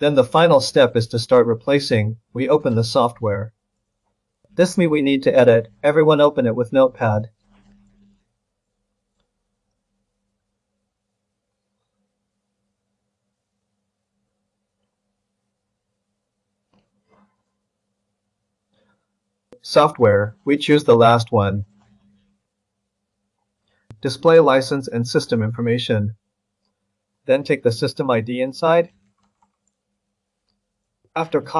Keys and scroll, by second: 29.0 ctrl+c.